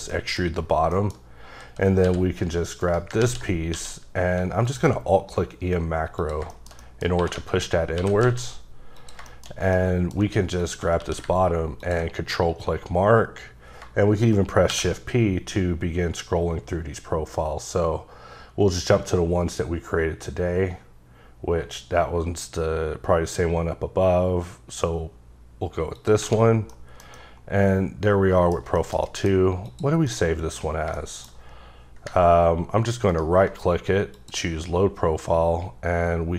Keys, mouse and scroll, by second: 0.1 middle click, 0.9 middle click, 1.3-2.1 scroll up 2, 2.1 e, 2.8 right click, 3.2 z, 3.7 q, 4.6 alt+click, 6.5 middle click, 7.2 2, 7.5 alt+click, 8.0 g, 8.2 z, 9.0 click, 9.3 shift+middle click, 9.5 scroll down 2, 9.6 scroll up 1, 9.8 middle click, 10.6 alt+click, 11.0 q, 11.8 ctrl+click, 12.6-13.5 scroll up 9, 14.7 shift+p, 15.5 scroll up 2, 16.4-18.8 scroll up 17, 20.1-22.2 scroll up 2, 22.9 scroll up 1, 24.4-26.0 scroll down 1, 26.0 click, 26.5 scroll down 2, 26.7 middle click, 27.2 double middle click, 28.6 scroll down 2, 28.7 shift+scroll up 1, 28.8 shift+middle click, 29.0 scroll down 1, 29.7 click, 30.1 middle click, 33.1 ctrl+right click, 34.1 click, 35.1-36.3 scroll down 4.